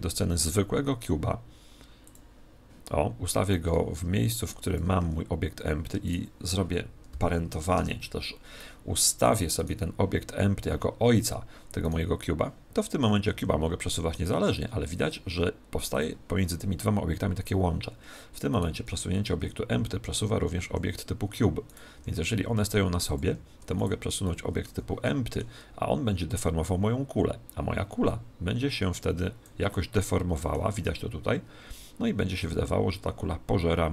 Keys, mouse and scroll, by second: 3.2 click, 5.0 z, 6.0 right click, 7.0 ctrl+p, 9.5 right click, 11.8 right click, 13.3 g, 16.0 click, 18.4 right click, 19.3 g, 21.6 right click, 21.9 g, 23.1 click, 23.7 right click, 24.2 middle click, 24.6 z, 24.8-26.4 middle drag, 26.4 click, 29.6-31.5 middle drag, 32.4 click.